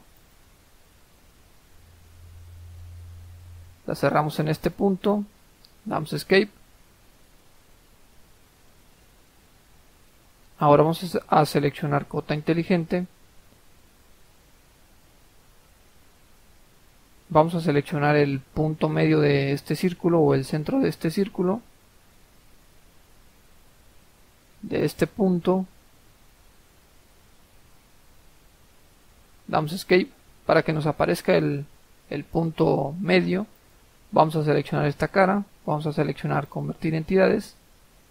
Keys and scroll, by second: 5.9 Escape, 29.3 Escape, 29.7 Escape, 29.8 Escape.